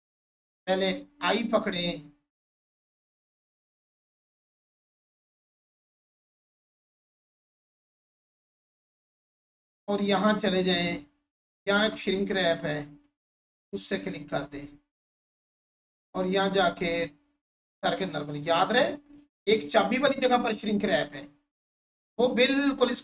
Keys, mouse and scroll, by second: 2.7 click, 15.8 click.